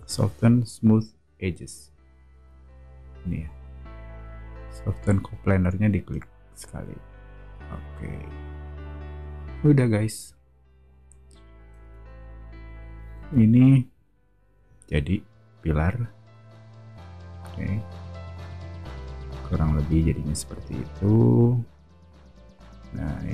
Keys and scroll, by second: 10.2 o, 11.8 space, 12.8 o.